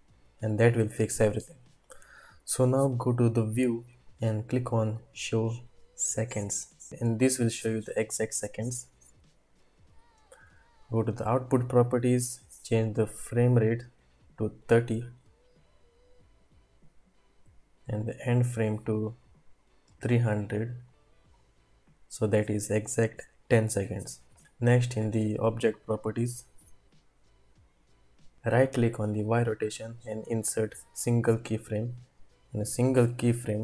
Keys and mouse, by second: 3.3-5.8 drag, 13.0-15.5 drag, 18.1 click, 19.9 click, 20.4 click, 20.8 click, 21.3 click, 25.6 click, 29.4-31.6 drag.